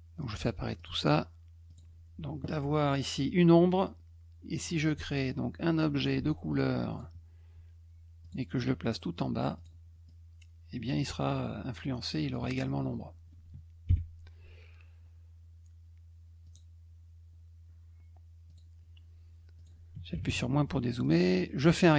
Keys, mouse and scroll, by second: 0.4 click, 0.8 click, 1.7 click, 4.5 click, 5.1 ctrl+shift+click, 6.9 click, 8.2 click, 9.6 click, 10.1 click, 11.3-12.3 drag, 16.4 click, 18.5 click, 19.6 click, 21.0-21.9 drag.